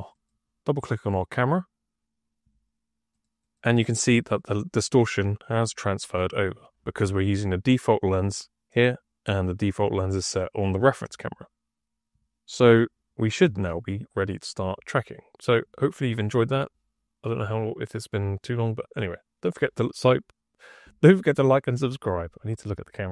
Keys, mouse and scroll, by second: 3.0 click, 3.3 click, 3.5 click, 4.1 click, 4.5 click, 4.8 click, 5.2 click, 5.6 click, 5.9 click, 6.2 click.